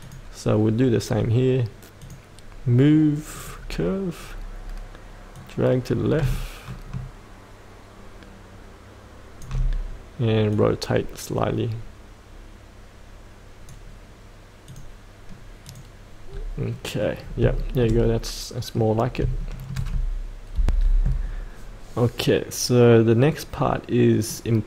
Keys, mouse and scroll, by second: 0.0 click, 4.2-5.3 scroll down 1, 5.3-14.6 drag, 16.2-16.7 scroll up 1, 16.7 middle click, 17.2 scroll down 1, 17.6-19.0 shift+middle drag, 19.0 scroll up 1, 19.4 shift+middle click, 20.5 F8, 21.9-24.2 scroll up 1, 24.2 middle click.